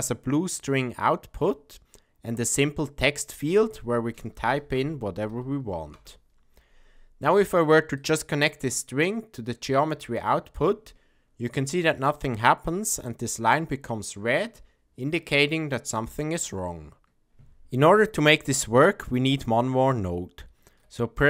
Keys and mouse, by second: 3.3-6.8 drag, 7.9-10.2 drag, 11.9-12.4 middle drag, 20.6 shift+a.